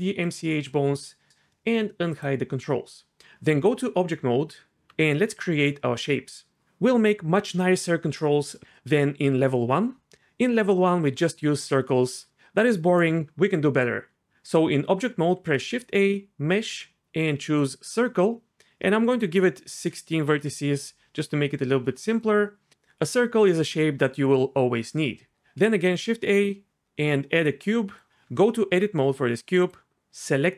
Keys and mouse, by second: 0.2 click, 3.7 Tab, 14.2 shift+a, 15.3 shift+a, 19.1-20.4 drag, 25.3 shift+a, 25.9 shift+a, 28.2 Tab, 29.6 middle click.